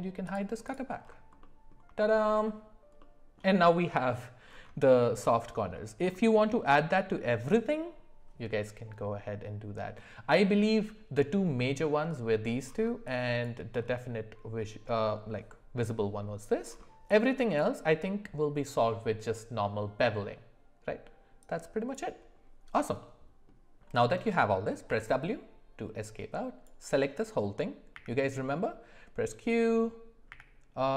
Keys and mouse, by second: 0.2 click, 1.4 middle click, 2.0 shift+middle click, 3.0 middle click, 23.0 middle click, 24.9 w, 26.0 click, 27.9 q, 30.6 q.